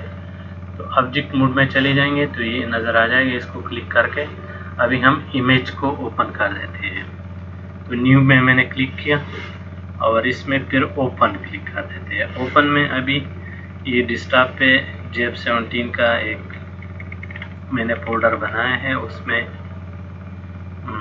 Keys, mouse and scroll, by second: 0.7 click, 3.6 click, 7.3 click, 11.6 click.